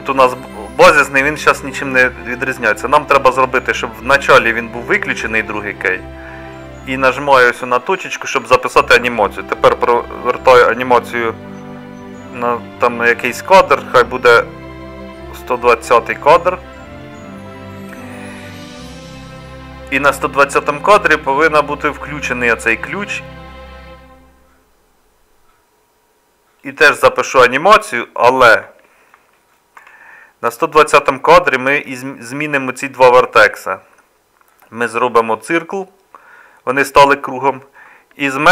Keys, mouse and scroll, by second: 29.8 Tab.